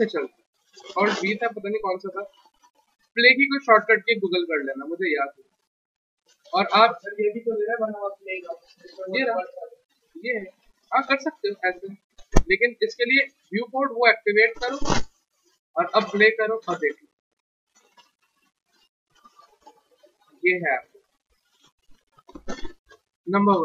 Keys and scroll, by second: 0.0 alt+v.